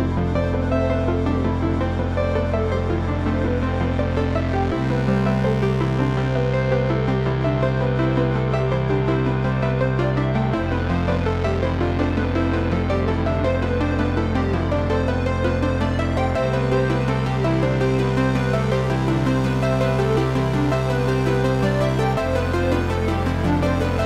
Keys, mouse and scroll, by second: 0.1 KP_4, 3.5-7.1 middle drag, 4.1 scroll down 1, 5.2 scroll up 1, 7.1-12.5 drag, 12.9-13.3 scroll down 1, 13.3 KP_7, 13.9-14.3 scroll down 1, 15.1 click, 16.7 click, 17.6 click, 18.3 shift+a.